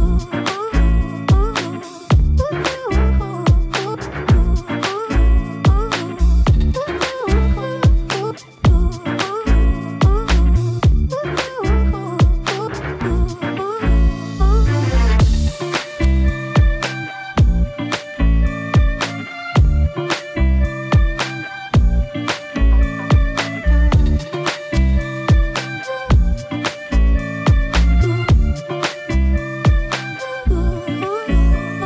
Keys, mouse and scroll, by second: 1.1-3.0 drag, 4.1 click, 4.2 1, 9.1-11.3 drag, 13.0-15.3 drag, 16.2-18.5 drag, 20.6-24.3 drag, 28.5 2, 28.7-31.8 drag.